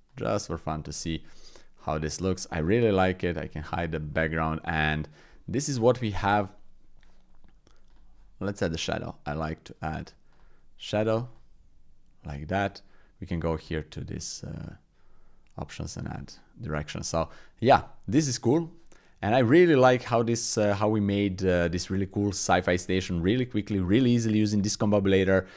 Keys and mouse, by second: 1.0-1.9 middle drag, 2.3 middle click, 3.2 click, 3.6 click, 4.1 shift+click, 4.4-5.1 drag, 5.3 click, 6.5 click, 7.9-16.1 drag, 16.2-17.0 middle drag, 19.7 drag, 20.6 click, 21.5 shift+click, 21.8-22.1 drag, 23.0-23.4 drag.